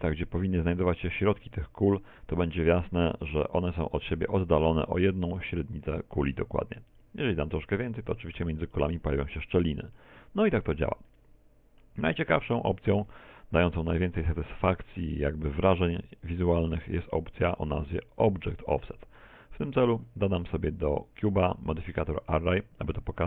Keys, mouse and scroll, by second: 8.1 click, 9.4 shift+middle click, 10.3 middle click, 11.2 middle click, 13.3 middle click, 14.0 shift+middle click, 14.3 middle click, 16.1 x, 16.7 shift+a, 19.0-19.4 scroll down 2, 19.4 shift+middle click, 20.7 click.